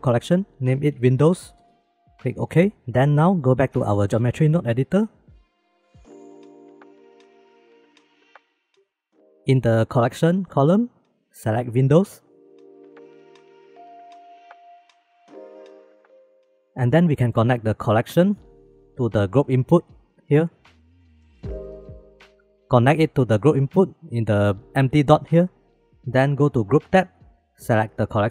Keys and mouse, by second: 3.9 shift+click, 4.8-5.5 shift+middle drag, 5.8-6.2 middle drag, 6.8-7.1 shift+middle drag, 7.3 shift+b, 8.2 click, 10.3-12.2 drag, 12.6 click, 13.4 middle click, 14.6 click, 15.3 click, 15.8 click, 17.1 click, 18.4-20.6 drag, 20.6-21.9 middle drag, 21.9-24.1 drag.